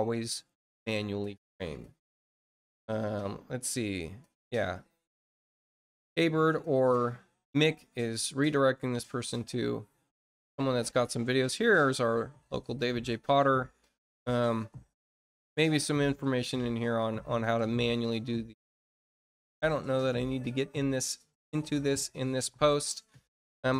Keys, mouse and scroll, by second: 1.3-1.7 scroll down 2, 2.0 scroll down 2, 2.7-3.0 scroll down 2, 5.9 click, 9.0-11.1 scroll down 12, 11.3-12.0 scroll up 4, 12.6-14.0 scroll down 8, 14.1 middle click, 14.8 middle click, 17.8 click, 20.1 click, 21.5 scroll down 1, 21.9 middle click, 22.5-22.8 scroll down 1, 22.8 middle click.